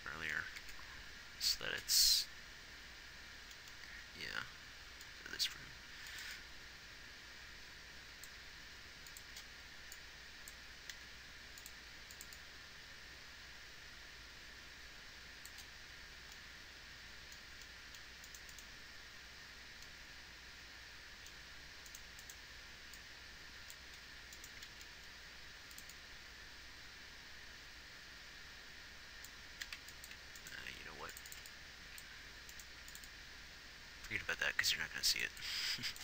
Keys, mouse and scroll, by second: 5.6 g, 8.8 g, 11.4 s, 12.2 g, 15.0 g, 25.0 shift+d, 31.6 a, 31.6 b, 31.6 x, 33.2 x.